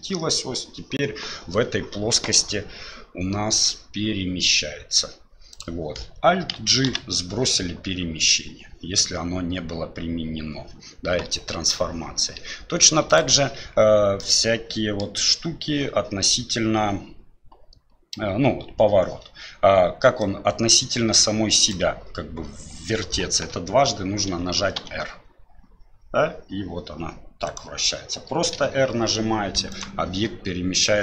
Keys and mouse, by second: 6.8 alt+g, 13.1 click, 14.2 middle click, 20.2-21.7 drag, 24.3 r, 28.5 r.